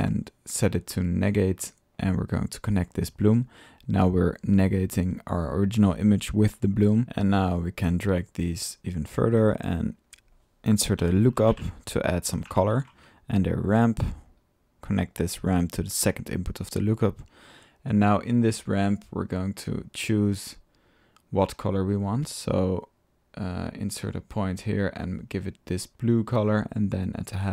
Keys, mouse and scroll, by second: 0.2 click, 0.7 drag, 1.6 click, 2.0-3.5 drag, 3.7-5.3 middle drag, 7.0 ctrl+click, 7.5-8.0 drag, 8.1-9.4 drag, 9.7 right click, 9.9 click, 9.9 right click, 10.3 click, 11.7 drag, 11.7 typing, 12.3 click, 12.4 Tab, 13.1-13.8 typing, 13.7 drag, 14.3 drag, 14.8-18.3 drag, 18.7-19.0 drag, 19.8-21.7 drag, 22.2-23.9 drag, 27.0-27.3 drag.